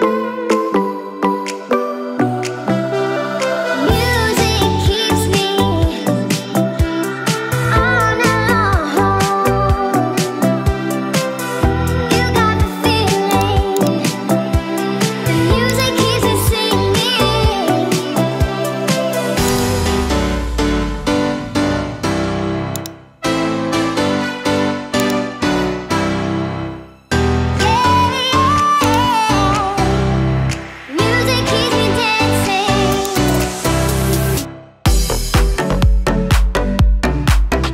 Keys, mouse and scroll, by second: 1.8 click, 2.1-3.3 drag, 4.0 KP_9, 4.4 click, 5.7 KP_1, 6.6 click, 7.2 click, 7.5 click, 7.7 click, 8.4 KP_9, 8.7 click, 9.3 click, 9.6 click, 10.0 KP_1, 10.7 KP_Divide, 13.4 click, 19.5-22.9 drag, 25.0 click, 32.0 click, 33.1 click, 33.9 space, 36.6 space.